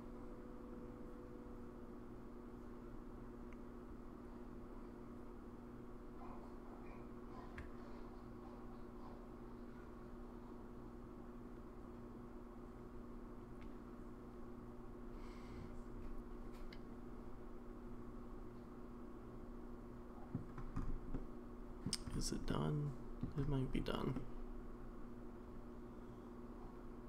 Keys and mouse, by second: 21.1-21.9 middle drag, 22.5-23.2 middle drag, 24.1-27.0 middle drag.